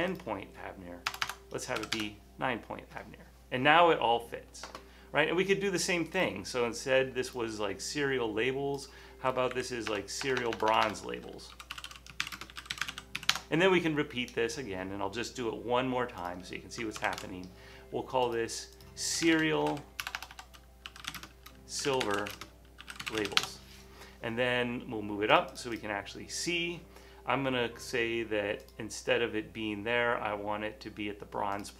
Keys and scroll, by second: 1.2 BackSpace, 1.3 BackSpace, 1.8 9, 2.0 Return, 5.1 typing, 9.7 Right, 10.0-11.6 typing, 12.8 typing, 16.2-16.9 typing, 17.1 super+c, 17.4 super+v, 19.1-23.7 typing, 26.5 typing.